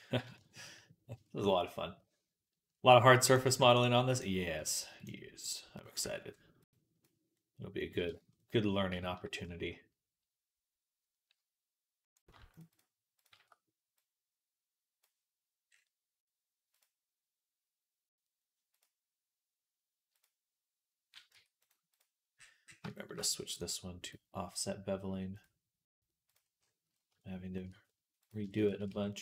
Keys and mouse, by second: 5.5 ctrl+click, 7.2-12.1 drag, 12.1-22.2 shift+middle drag, 13.8-22.2 drag, 21.2 Tab, 21.5 right click, 22.5-23.5 shift+drag, 22.5-23.5 shift+middle drag, 22.5-28.3 shift+right drag, 25.2-28.3 drag, 25.2-28.5 middle drag, 28.7 Tab.